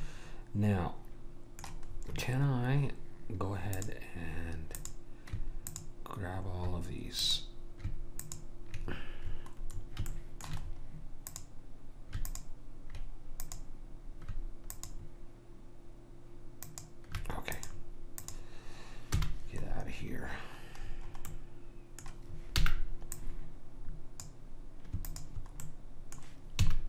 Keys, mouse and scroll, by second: 0.0 middle click, 1.9-3.3 scroll up 1, 3.3-3.8 scroll up 1, 3.8-10.1 drag, 10.1-11.3 middle drag, 11.3-16.6 drag, 11.3-12.3 right drag, 16.7-20.1 drag, 19.1 h, 20.2-23.3 middle drag, 22.8 b, 25.1 click, 25.7-26.7 right drag, 26.7 a.